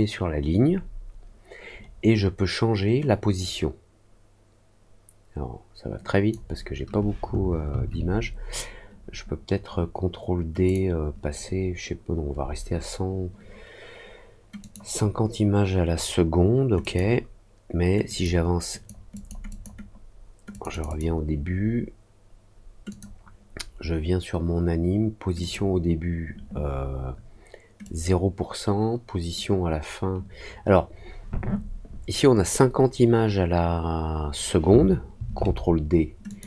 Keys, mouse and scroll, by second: 3.3-6.2 drag, 10.6 click, 14.5 click, 16.7 click, 18.0 click, 18.6 click, 19.1 click, 19.4 click, 20.6 click, 20.8 click, 22.8 click, 25.3 click, 27.8-29.3 drag, 36.2 click.